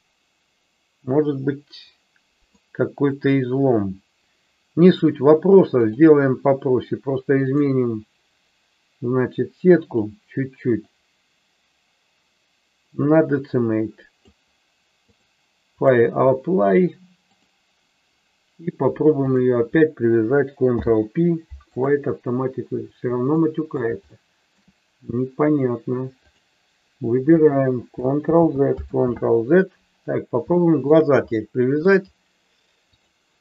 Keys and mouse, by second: 5.8-7.6 drag, 10.0-14.2 drag, 14.9-15.9 drag, 20.7 ctrl+p, 23.3 middle click, 24.1 shift+middle click, 28.3 ctrl+z, 28.8 ctrl+z, 30.5 shift+middle click, 31.2 middle click.